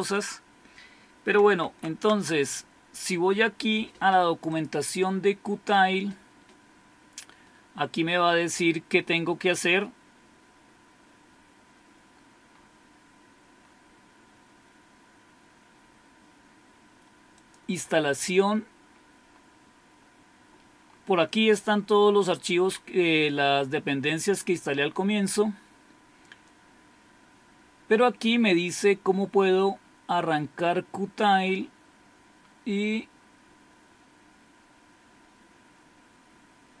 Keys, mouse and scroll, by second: 0.0-1.7 drag, 1.7 alt+Tab, 4.5-5.9 drag, 7.5-9.4 scroll down 1, 11.7-13.6 scroll down 1, 13.6-15.1 scroll down 1, 15.1-15.9 scroll down 1, 15.9-16.2 scroll down 1, 17.4-20.9 drag, 20.9-23.4 scroll up 1, 24.9-29.7 scroll down 2, 29.7-36.8 scroll down 1.